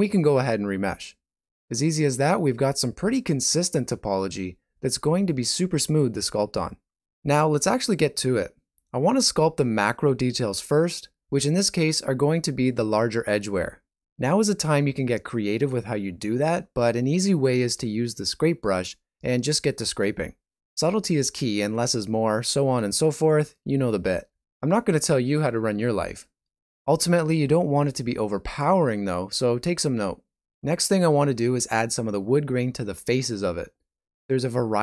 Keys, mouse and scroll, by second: 8.6 shift+middle click, 9.4 click, 9.9 click, 11.3 click, 11.9 click, 14.0 middle click, 14.7 shift+middle click, 15.9 shift+click, 16.7 shift+click, 17.1 middle click, 17.5 shift+middle click, 17.7 ctrl+middle click, 18.2 shift+click, 20.3 click, 20.3 middle click, 20.5 ctrl+middle click, 20.8 shift+middle click, 21.9 shift+middle click, 22.4 middle click, 22.9 shift+middle click, 23.2 ctrl+middle click, 23.9 click, 24.4 click, 24.7 click, 25.1 click, 25.4 click, 25.7 middle click, 26.0 shift+middle click, 26.3 ctrl+middle click, 26.8 ctrl+middle click, 27.3 ctrl+middle click, 27.5 shift+middle click, 27.9 click, 29.4 middle click, 29.7 shift+middle click, 30.4 click, 30.8 click, 31.3 click, 31.6 click, 31.9 shift+middle click, 32.8 click, 33.3 click, 33.8 click, 34.0 click, 34.3 click, 34.4 click, 34.7 click.